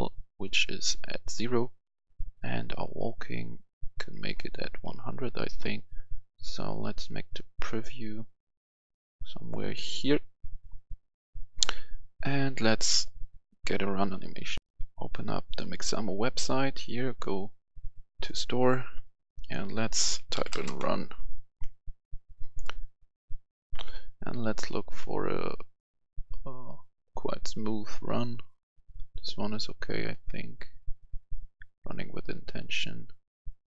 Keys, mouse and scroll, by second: 6.0-9.9 shift+drag, 12.3-14.6 drag, 14.6 F10, 15.4 click, 20.2-20.5 typing, 20.7 Return, 23.6 F11, 23.7 F10, 28.1 click.